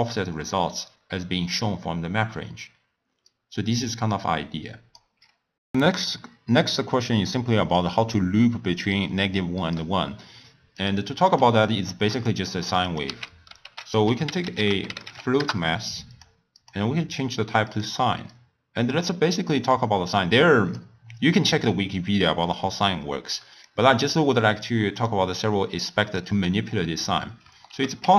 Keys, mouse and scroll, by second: 3.3-5.5 drag, 7.7-10.8 drag, 11.3 click, 12.1 click, 12.8 click, 13.3 x, 13.6 ctrl+a, 16.5-19.3 drag, 19.3 middle click, 20.0-23.0 drag, 23.7-27.7 drag, 27.7 ctrl+a.